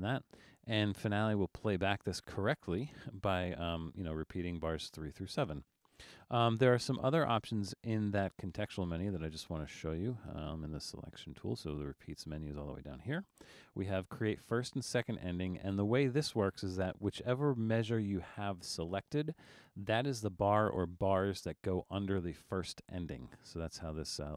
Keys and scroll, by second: 5.8 super+z.